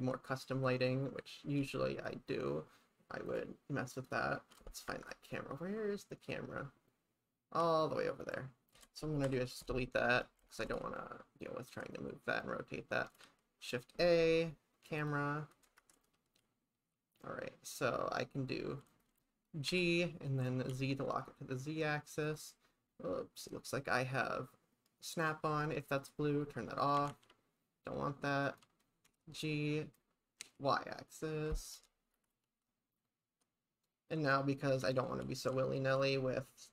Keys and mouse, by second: 4.0 click, 4.9 shift+`, 9.3 Delete, 10.5 shift+`, 13.2 shift+a, 15.8 shift+`, 19.7 g, 20.7 z, 22.2 click, 25.1 click, 27.0 g, 27.1 z, 28.4 click, 29.1 g, 30.4 y, 31.5 click, 32.1 shift+`.